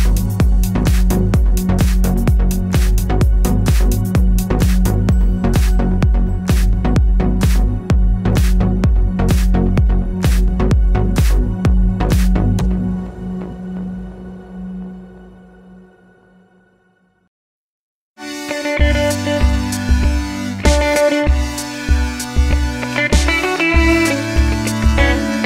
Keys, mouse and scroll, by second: 8.3 click, 8.8-10.9 middle drag, 9.2 alt+d, 10.9 click, 11.0-13.5 middle drag, 12.7 s, 13.5 click, 13.5 g, 13.8 click, 13.9-14.9 middle drag, 14.6 alt+d, 14.9 click, 15.1 r, 16.3 click, 16.4 g, 16.7 click, 16.8 s, 17.2 click, 17.3-18.7 middle drag, 18.7 click, 19.0 click, 19.6-21.1 middle drag, 20.0 alt+d, 21.1 r, 22.4 click, 22.4 g, 23.1 click, 23.3-25.4 middle drag.